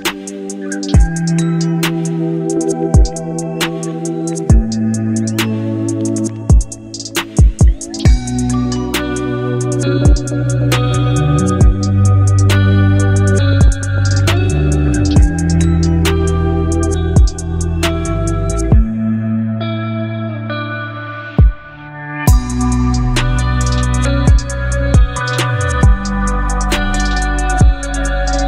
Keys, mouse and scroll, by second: 1.6 alt+scroll up 1, 2.6 space, 2.8-4.0 click, 3.2 space, 4.7 alt+scroll up 1, 5.7 space, 5.8-8.0 click, 6.2 space, 8.7 alt+scroll down 1, 11.7 space, 11.8-12.4 click, 12.2 space, 12.7 alt+scroll down 1, 13.5-14.1 space, 14.0 space, 14.8 click, 20.9-25.8 drag.